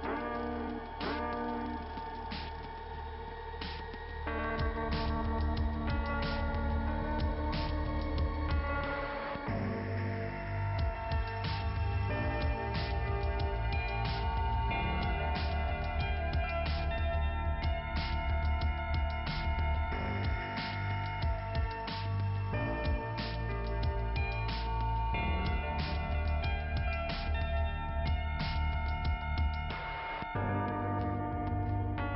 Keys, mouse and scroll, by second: 0.7 click, 1.4 right click, 2.3 click, 3.1 click, 3.9 click, 4.5 click, 4.6 click, 6.0 click, 8.4 click, 9.2 click, 10.0 click, 11.0 click, 11.6 click, 11.7 click, 11.9 click, 12.0 double click, 13.6 click, 14.1 c, 14.3 click, 14.5 c, 17.0-19.0 typing, 18.0 Return, 18.2 Return, 18.6 Return, 18.8 Return, 19.1 Return, 19.4 Return, 21.5 click, 27.6 click, 28.0 click, 28.1 double click, 28.9 double click, 30.0 click, 31.7 click.